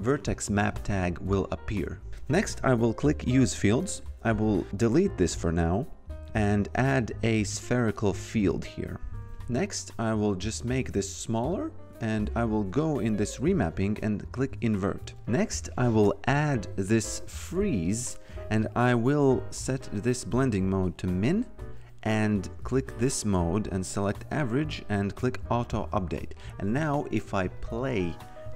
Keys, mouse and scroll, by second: 3.2 click, 5.3 Delete, 6.7 click, 8.5 click, 10.5 t, 10.8 click, 14.2 click, 16.9 click, 19.7 click, 22.3 click, 25.2 click, 27.4 click.